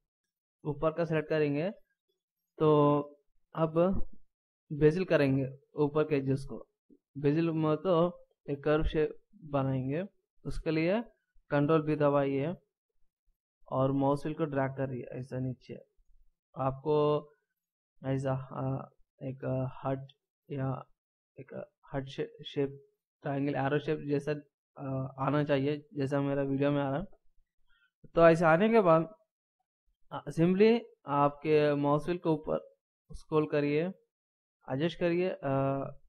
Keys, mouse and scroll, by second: 12.1 ctrl+b.